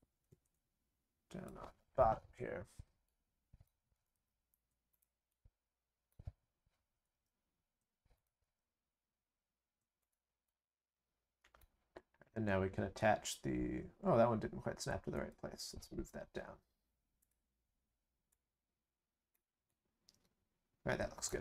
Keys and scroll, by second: 3.9 ctrl+c, 4.1 ctrl+v, 7.0 ctrl+v, 8.4 ctrl+v.